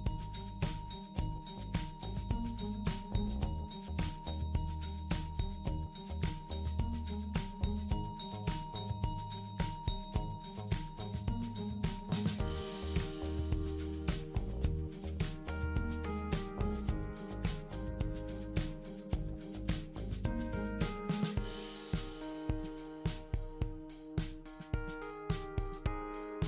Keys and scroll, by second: 8.4 d, 8.6 d, 9.8 d, 10.1 d, 14.1 typing, 19.3 d, 19.4 d, 22.1-23.1 typing.